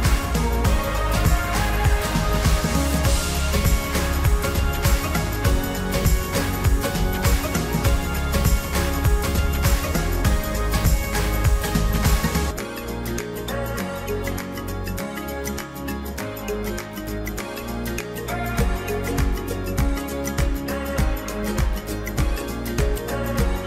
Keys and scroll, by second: 1.4 ctrl+alt+shift+e.